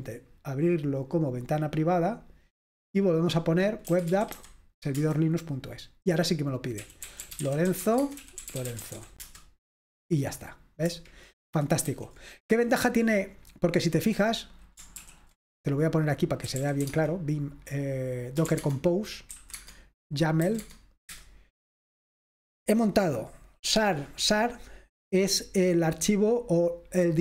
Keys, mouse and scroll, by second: 0.0 click, 1.4 click, 3.8-4.9 typing, 5.0 Return, 6.7-9.5 typing, 11.9 super+w, 13.9 click, 15.0 ctrl+l, 16.3-21.1 typing.